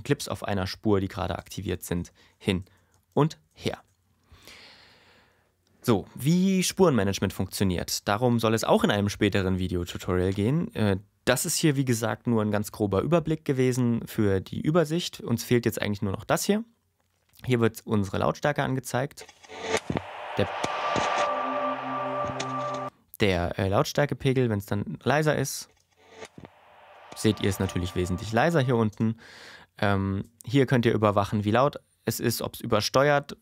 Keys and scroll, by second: 2.9 shift+Right, 3.2 shift+Left, 3.7 shift+Left, 19.2 space, 22.7 space, 25.7 space, 28.9 space.